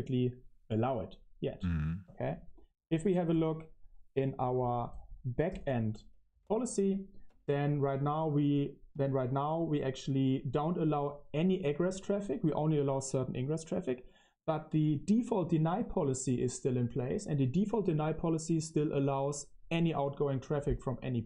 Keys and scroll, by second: 5.6-7.7 typing, 8.8 o.